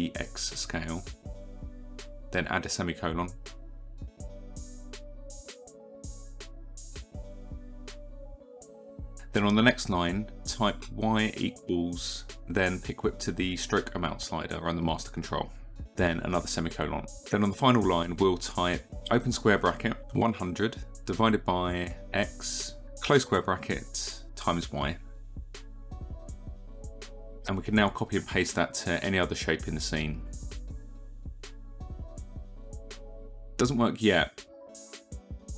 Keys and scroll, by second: 5.5 Return, 7.4 y, 10.3 Return, 10.9 y, 11.3 space, 26.2 y, 26.8 ctrl+c, 28.4 ctrl+v, 31.2 s, 31.7 s, 33.1 KP_2, 33.4 Return, 35.0 Return.